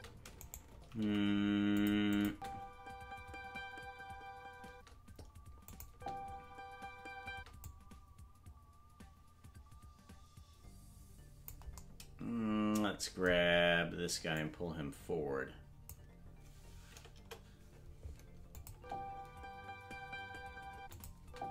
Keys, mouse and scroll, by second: 0.3 right click, 1.0 g, 2.1-5.1 drag, 2.2 space, 5.1 space, 5.6 click, 5.8 space, 7.6-11.5 drag, 7.6 space, 14.3 click, 17.1 KP_0, 18.5 click, 18.7 space, 20.9 click, 20.9 space, 21.2 space.